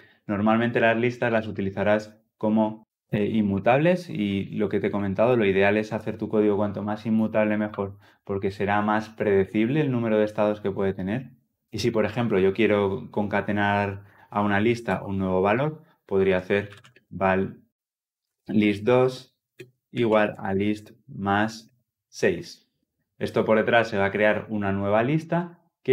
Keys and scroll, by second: 3.0 ctrl+z, 3.8 ctrl+z, 4.6 ctrl+z, 7.5 ctrl+z.